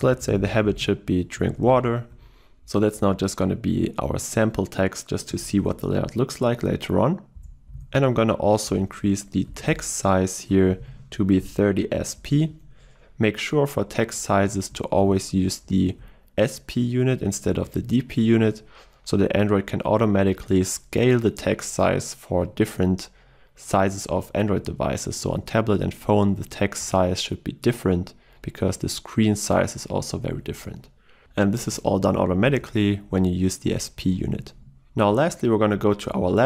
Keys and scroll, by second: 9.8 Return, 35.2 alt+Down.